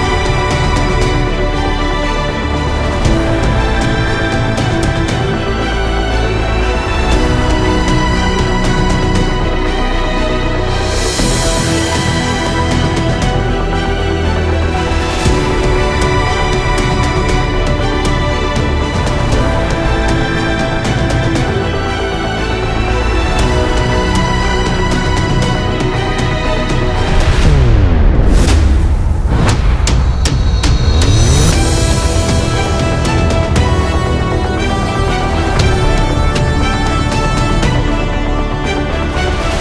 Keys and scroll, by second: 5.2 typing, 19.8 ctrl+alt+space, 20.0 ctrl+alt+space, 20.9 ctrl+alt+space, 27.2 ctrl+alt+space, 27.7 typing.